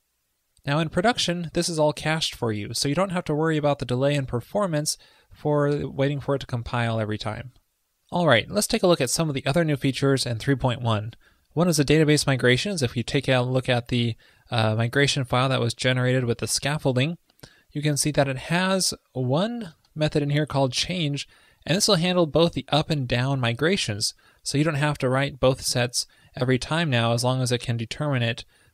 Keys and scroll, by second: 5.4 shift+super+Left, 7.0 super+s.